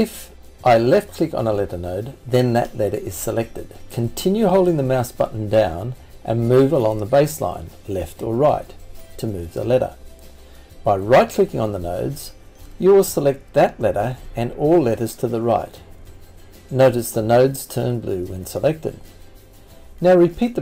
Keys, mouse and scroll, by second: 9.8-14.8 right drag.